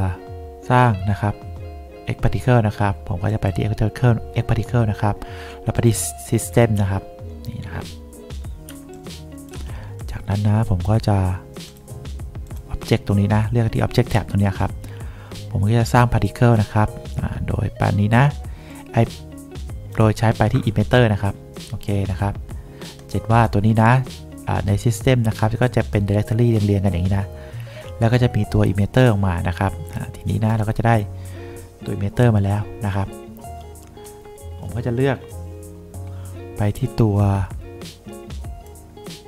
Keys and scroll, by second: 8.9 1.